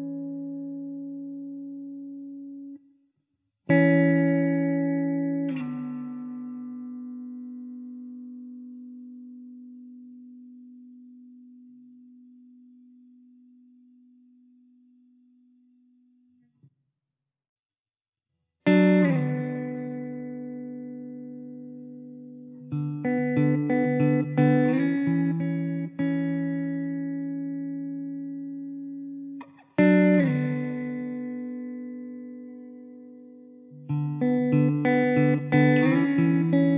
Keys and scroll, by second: 2.8 Tab, 3.1 Tab, 3.4 `, 5.9 s, 7.1 alt+z, 8.1 s, 10.5 alt+z, 11.8 Tab, 12.2 1, 12.9 s, 16.3 Tab, 17.3 alt+z, 22.1 shift+d, 26.5 shift+d, 27.2 ctrl+z, 30.1 ctrl+z, 30.8 shift+d, 35.1 Tab, 35.4 Tab.